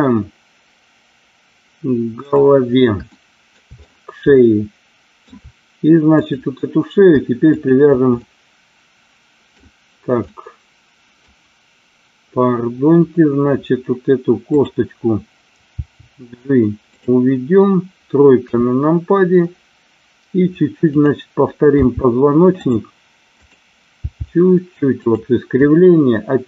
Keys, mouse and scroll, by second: 2.3 click, 3.0 shift+middle click, 4.6 shift+middle click, 6.2 click, 7.6 shift+click, 8.0-9.6 middle drag, 10.2 middle click, 14.5 click, 15.7 g, 16.8 click, 18.4 KP_3, 21.7 g, 22.6 click, 23.9 g, 25.0 click.